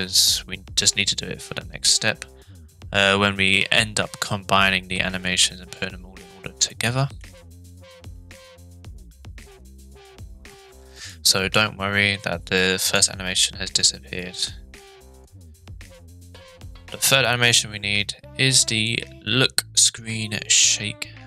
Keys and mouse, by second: 6.7 middle click, 9.6-11.1 drag, 12.8-13.4 drag, 13.5-15.3 drag.